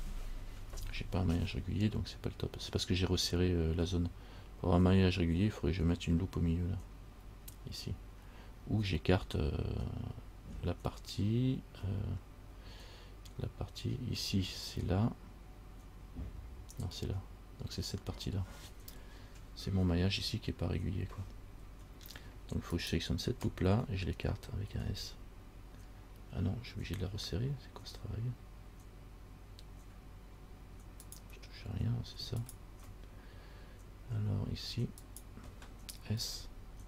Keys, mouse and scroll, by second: 20.4-22.0 scroll down 4, 22.0-22.8 scroll up 2, 22.9 alt+right click, 24.9 s, 32.6 alt+right click, 35.2 alt+right click, 36.4 s.